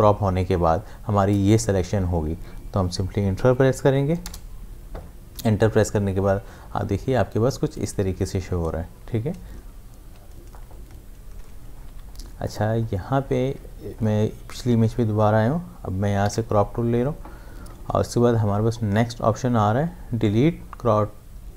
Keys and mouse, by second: 11.9 v, 12.5 click, 16.2 c.